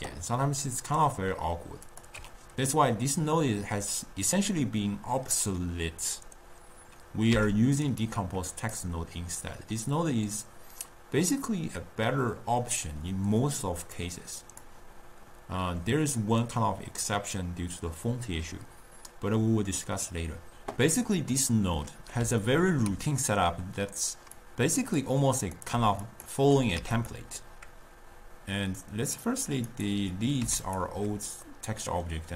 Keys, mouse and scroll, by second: 2.0 click, 7.7 x, 8.2 click, 14.1-17.5 drag, 21.6-24.5 middle drag, 24.5-25.6 drag, 26.1 shift+click, 26.8 x, 28.9-30.0 drag, 30.6 x, 31.7-32.3 middle drag.